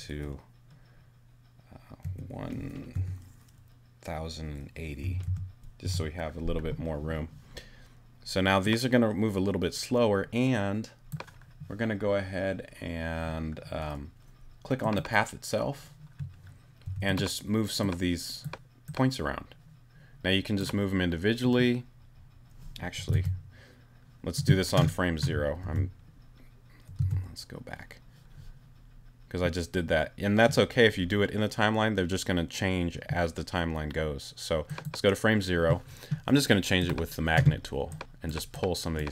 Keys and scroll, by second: 2.0 i, 2.9 0, 4.8-5.7 typing, 5.8 Return, 16.8 t, 23.1 super+z, 25.6 super+z.